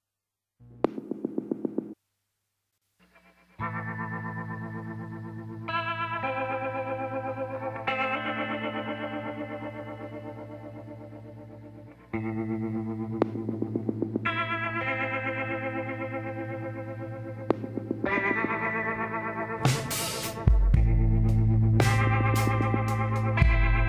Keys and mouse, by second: 2.9 g, 10.0 middle click, 14.3 ctrl+z, 14.9 ctrl+z, 18.2 z, 19.1 b, 21.3 s.